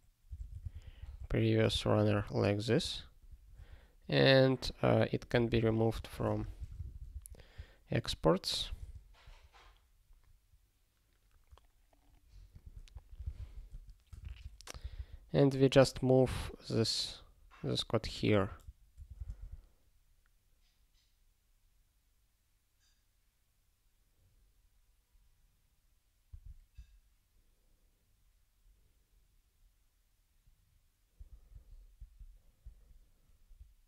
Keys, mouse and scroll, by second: 0.0-1.1 typing, 1.8 Return, 2.2 ctrl+s, 3.3 alt+<, 5.2 click, 5.6 ctrl+k, 6.0 ctrl+n, 6.4 alt+^, 6.8 ctrl+s, 8.8 ctrl+space, 10.3 scroll down 1, 12.5 click, 12.9 ctrl+a, 13.1 ctrl+n, 13.2 Return, 13.4 ctrl+p, 13.8 Tab, 14.2 (, 14.9 super+b, 18.0 click, 18.4 ctrl+f, 19.0 ctrl+f, 19.2 ctrl+space, 19.2 ctrl+e, 26.3 alt+w, 31.5 alt+w, 31.9 ctrl+g, 32.6 alt+w, 33.5 ctrl+n.